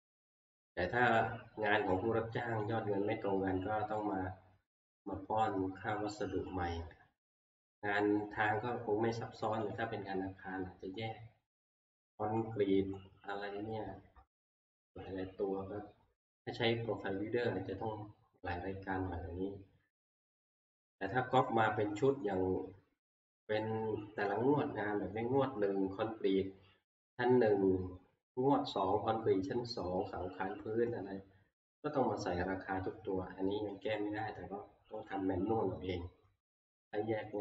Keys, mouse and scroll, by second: 0.9 click, 2.7 click, 6.1-7.8 drag, 9.8-14.8 drag, 33.9 click, 35.1 click.